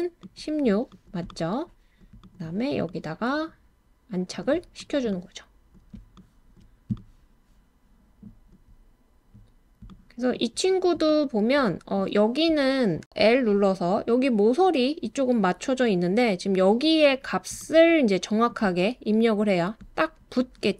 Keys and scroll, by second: 13.1 typing.